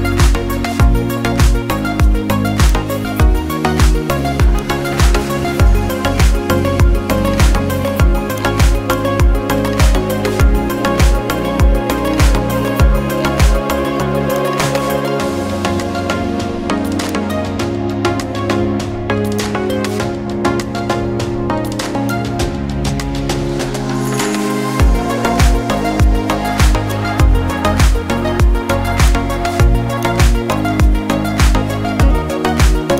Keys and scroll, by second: 25.2 ctrl+i.